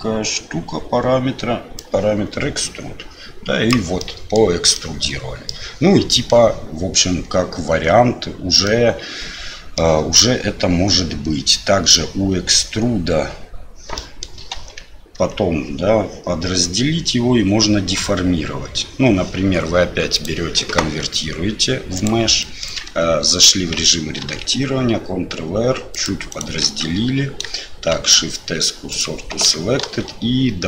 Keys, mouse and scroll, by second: 1.7-3.7 drag, 3.9 middle click, 4.7 middle click, 8.6-9.7 middle drag, 14.0 middle click, 14.5 Tab, 15.1 Tab, 20.2-22.0 drag, 22.4 middle click, 22.8 Tab, 24.2 ctrl+r, 26.6 Tab, 27.9 shift+s, 29.8 shift+a.